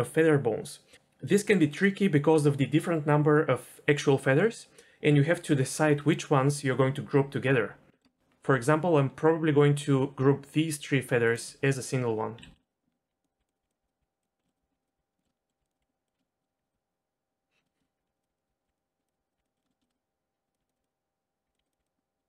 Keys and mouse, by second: 7.9 middle click, 8.4 ctrl+z, 8.4 d, 8.6-11.3 drag, 11.3 d, 12.4 ctrl+z, 12.9 Tab, 13.1-16.7 typing, 14.4 middle click, 15.2 shift+middle click, 16.1 shift+middle click, 17.8 shift+click, 17.9-19.4 typing, 19.0 click, 19.5 middle click, 19.9 middle click, 20.6-22.2 typing, 21.7 click, 21.9 middle click.